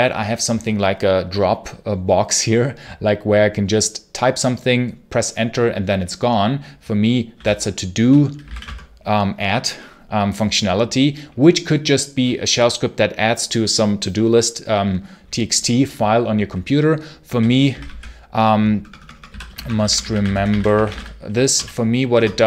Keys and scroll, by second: 8.0-8.9 typing, 16.9-21.4 typing, 22.0 Return.